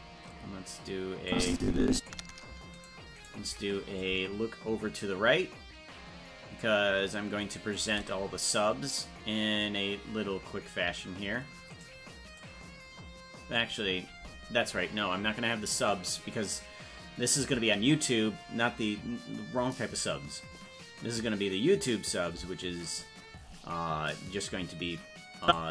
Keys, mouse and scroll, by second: 1.3 click, 2.8 shift+right click, 4.0-7.7 shift+drag, 11.8 right click, 12.3-13.6 drag, 25.4 click.